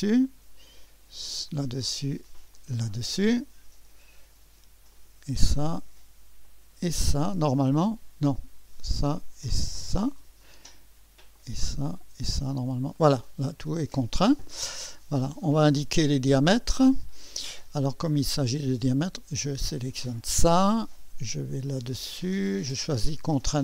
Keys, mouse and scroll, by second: 1.2 click, 2.5 click, 4.9 click, 6.4 click, 8.9 click, 9.9 click, 11.3 click, 12.3 click, 15.2 right click, 19.7 click, 22.5 click.